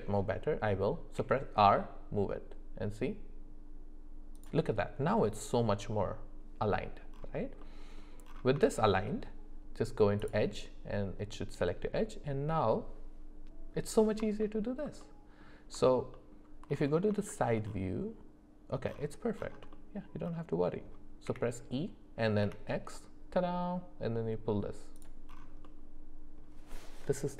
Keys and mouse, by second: 1.1 r, 7.6 middle click, 8.6 shift+middle click, 10.2 click, 14.4 alt+middle click, 15.0 middle click, 15.9 alt+middle click, 16.1 alt+middle click, 17.3 shift+middle click, 19.7 middle click, 20.6 middle click, 21.2 e, 25.6 middle click.